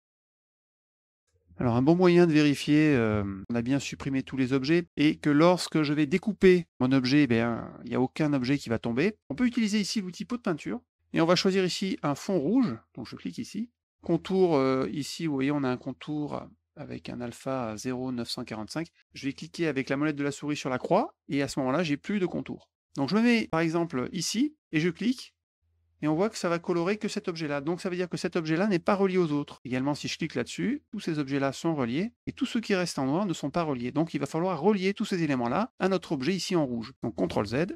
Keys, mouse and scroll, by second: 0.1 click, 0.2 click, 0.3 click, 0.4 click, 0.5 middle click, 0.7 click, 0.8 middle click, 0.8 middle click, 0.9 click, 0.9 click, 1.0 click, 1.1 click, 1.1 click, 2.4 middle click, 3.4 middle click, 3.8 middle click, 4.6 middle click, 13.7 click, 20.8 middle click, 25.4 click, 30.0 click, 37.5 z.